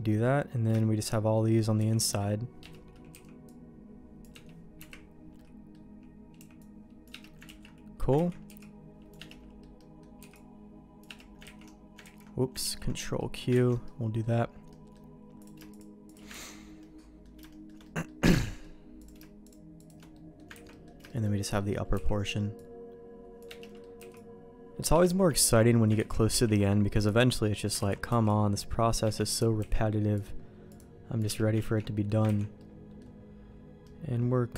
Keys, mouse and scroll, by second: 0.7 middle click, 1.8 v, 2.6 Escape, 3.1 c, 4.8 KP_Decimal, 5.3 middle click, 6.3 c, 7.4 ctrl+q, 8.1 ctrl+x, 8.4 c, 9.3 middle click, 9.8 middle click, 10.2 c, 11.6 ctrl+x, 12.0 ctrl+z, 12.6 ctrl+q, 13.2 middle click, 13.6 ctrl+x, 13.8 middle click, 14.7 middle click, 15.4 click, 16.0 click, 16.4 ctrl+x, 16.8 middle click, 17.5 shift+middle click, 17.8 middle click, 18.4 middle click, 19.0 click, 19.4 shift+click, 20.1 middle click, 20.5 ctrl+x, 20.7 middle click, 21.0 middle click, 21.6 middle click, 23.6 c, 23.6 middle click, 24.0 c, 25.4 ctrl+x, 26.0 ctrl+z, 26.5 ctrl+q, 27.9 ctrl+x, 28.1 c, 29.2 middle click, 29.6 c, 31.6 ctrl+q, 32.2 ctrl+x, 32.6 middle click, 33.8 middle click.